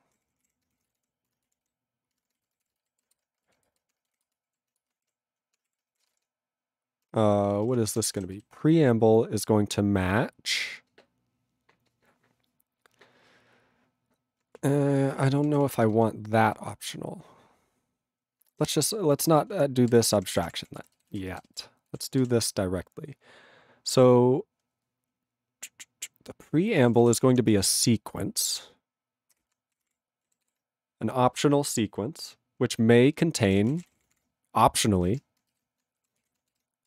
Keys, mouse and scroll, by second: 0.2 ctrl+o, 0.4 Tab, 0.5-6.1 typing, 3.6 ctrl+e, 5.6 Delete, 7.1 Delete, 7.7 ,, 8.0 ctrl+a, 8.1 ctrl+e, 8.2 ctrl+g, 8.4 ctrl+b, 14.6 ctrl+a, 15.1 ctrl+e, 15.2 ctrl+p, 16.1 alt+b, 18.6 ctrl+n, 19.3 ctrl+space, 19.5 ctrl+p, 19.9 ctrl+w, 20.0 ctrl+p, 20.2 ctrl+k, 20.3 ctrl+p, 20.4 ctrl+e, 20.5 ctrl+p, 20.8 ctrl+e, 21.0 ctrl+b, 21.2 ctrl+space, 21.6 ctrl+alt+b, 22.2 ctrl+w, 26.6-27.8 typing, 29.4 Return, 29.8 ctrl+a, 29.8 ctrl+o, 29.8 Tab, 30.5 ctrl+s, 33.3-34.7 typing, 35.3 ctrl+e, 35.6 ctrl+b, 36.0-36.8 typing.